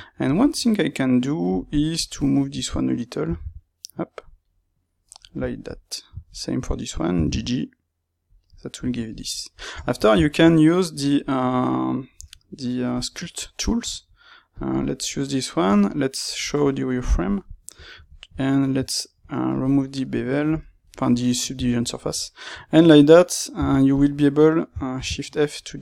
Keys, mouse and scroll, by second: 2.0 alt+click, 3.2 g, 5.0-6.3 middle drag, 6.3 alt+click, 7.1 g, 8.3 click, 8.4-14.5 middle drag, 9.7 Tab, 13.1 Tab, 14.5 click, 14.9-17.0 middle drag, 17.0 click, 17.4-18.9 middle drag, 18.9-20.0 alt+right drag, 20.0-23.9 middle drag, 23.5 f, 23.9 click, 24.9 shift+f.